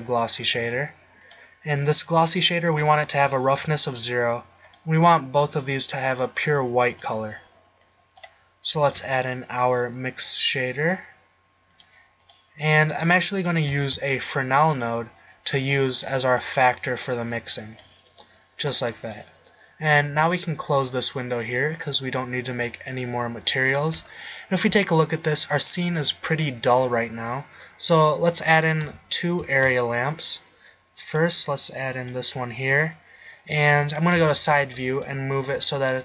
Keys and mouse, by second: 2.9 click, 4.7-5.7 drag, 8.0 click, 8.9 shift+a, 12.5 click, 12.8-13.6 drag, 13.9 shift+a, 17.0-17.8 drag, 18.5 middle click, 18.8 middle click, 19.9-20.6 middle drag, 22.1 middle click, 28.8 z, 29.5 shift+a, 34.2 KP_3, 35.5 g.